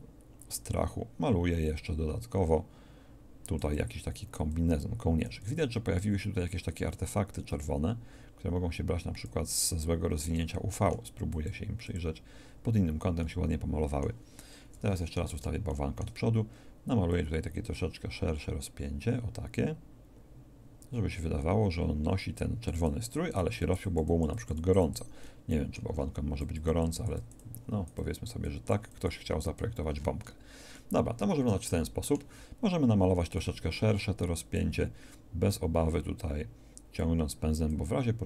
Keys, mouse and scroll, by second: 10.2 middle click, 11.2-13.5 drag, 14.6 KP_1, 25.1-29.5 drag.